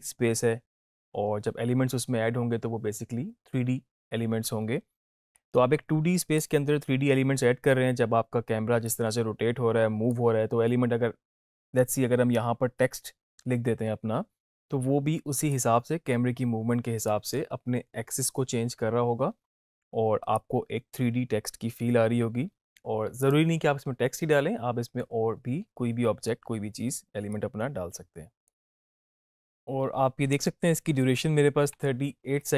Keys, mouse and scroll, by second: 5.3 click, 5.4-6.5 drag, 8.8-10.4 drag, 15.5-17.0 drag, 20.3-23.4 drag, 27.2-28.5 drag, 28.6 space, 29.5 space.